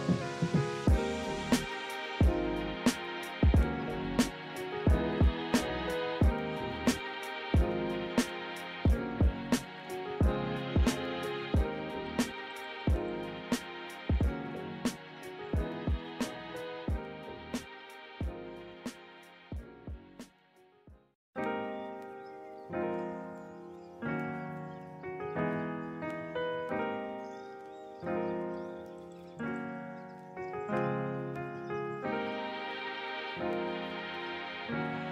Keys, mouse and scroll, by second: 1.5 ctrl+=, 7.5 right click, 12.4 ctrl+-, 13.2 ctrl+=, 19.9 ctrl+z, 21.1 ctrl+-, 29.2 ctrl+=.